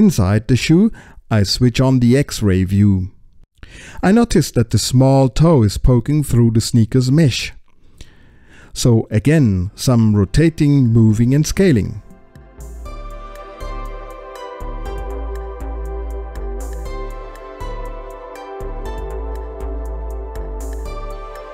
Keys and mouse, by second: 0.1 space, 0.4 click, 0.7 click, 1.0 KP_Decimal, 3.0 alt+z, 4.5 click, 5.1 space, 5.8 click, 8.3 alt+z, 11.3 click, 12.1 middle click, 12.4 space, 12.6 space, 12.8 click, 13.4 middle click, 13.8 click, 14.1 middle click, 14.7 space, 14.9 click, 15.4 space, 15.6 space, 15.8 alt+z, 15.8 click, 16.5 middle click, 17.0 alt+z, 17.2 space, 17.4 click, 18.0 middle click, 18.5 space, 18.7 click, 19.2 middle click, 19.7 click, 20.5 space, 20.7 click, 21.4 middle click.